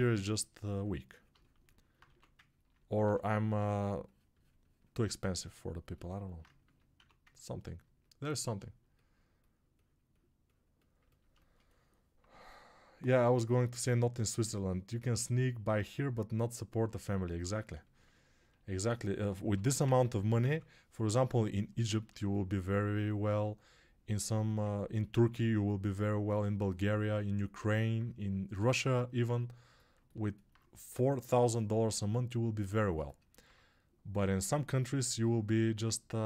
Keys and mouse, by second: 1.9-8.4 drag, 2.0 1, 2.9 2, 6.9 1, 8.4-9.9 alt+shift+right drag, 9.9-36.2 alt+drag, 19.3 g, 19.7 ].